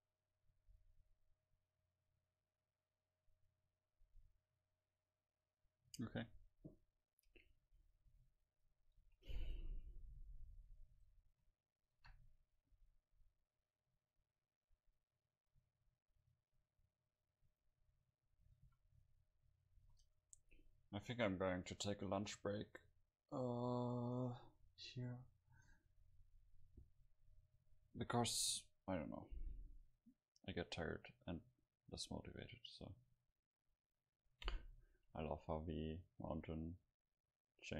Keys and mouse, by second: 7.7 a, 8.1 a, 9.0 ctrl+s, 10.6 KP_7, 14.8-15.8 middle drag, 17.5 middle click, 18.5 a, 18.7 a, 19.8 ctrl+s, 28.4-37.3 middle drag.